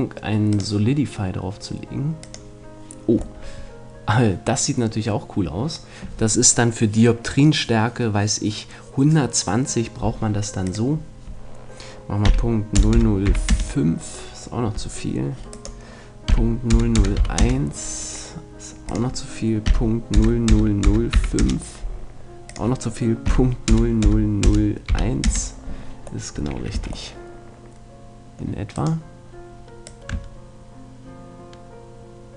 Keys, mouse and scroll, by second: 0.5-2.4 drag, 3.4-5.4 middle drag, 10.7-12.5 drag, 15.6-17.3 drag, 18.9-20.7 drag, 22.5-24.4 drag, 26.3-28.8 middle drag, 26.8 a, 28.8-30.6 right drag, 29.8-31.6 drag.